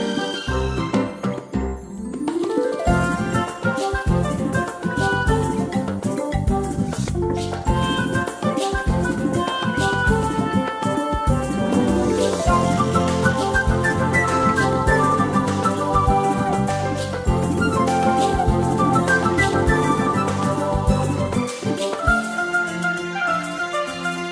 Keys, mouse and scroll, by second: 1.0 ctrl+scroll up 1, 1.7 space, 3.0 ctrl+scroll down 1, 4.1 space, 5.1-5.4 scroll down 1, 5.5 ctrl+scroll up 1, 6.1-6.6 scroll down 1, 6.6 space, 13.8 click, 17.5 space, 17.7 click.